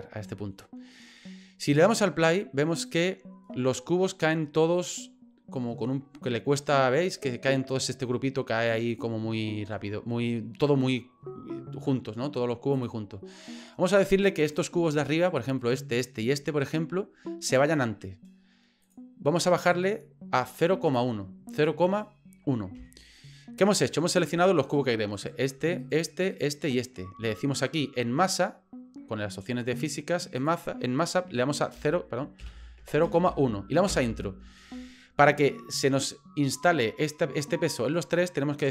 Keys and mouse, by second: 2.9 click, 8.9 click, 12.7 click, 14.4 right click, 15.1 shift+right click, 15.6 shift+right click, 16.1 shift+right click, 18.8-24.7 drag, 25.2 right click, 25.8 shift+right click, 26.3 shift+right click, 26.6 shift+right click, 30.5-34.6 drag.